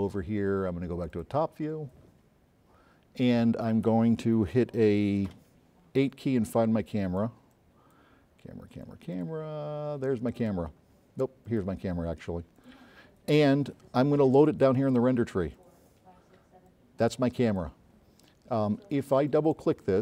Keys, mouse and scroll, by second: 1.2 click, 2.3-2.6 scroll down 2, 2.9-3.8 scroll up 6, 5.4 8, 6.6-6.9 drag, 7.4 click, 7.8 drag, 9.2 click, 10.5 click, 11.5 click, 12.6 click, 15.7 click, 16.7-17.9 drag, 19.3 click, 19.6 click.